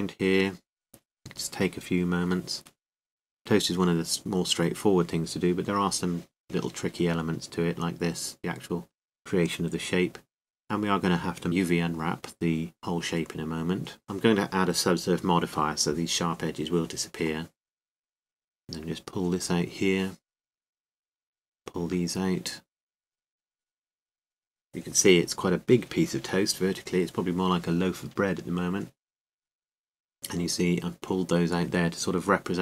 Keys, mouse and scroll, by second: 0.9 right click, 12.0 a, 12.7 click, 12.8 c, 13.9-15.1 right drag, 14.1 g, 17.0 click, 17.0 a, 17.5 c, 17.7-19.2 drag, 17.7 a, 18.6 c, 20.6-22.3 drag, 20.6 g, 20.6 a, 21.1 c, 23.0 right click, 23.3 g, 26.6 a, 28.0 c, 29.9 KP_7, 31.1-32.6 drag.